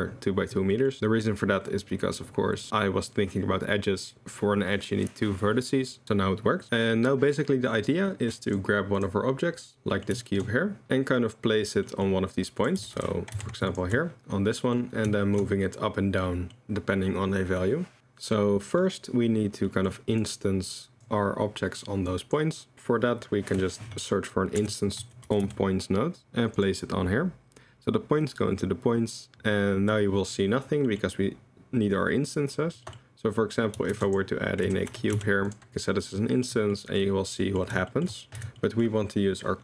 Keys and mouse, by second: 6.7 click, 9.9 click, 10.2 shift+click, 11.8 drag, 12.6 click, 12.8 g, 14.6 middle drag, 15.2 shift+middle drag, 16.3 middle drag, 19.7 middle drag, 20.2 click, 21.7 middle click, 22.1 click, 22.7 shift+a, 29.2 click, 31.0 click, 33.9 shift+a, 37.9 shift+right click, 38.4 x, 38.7 click.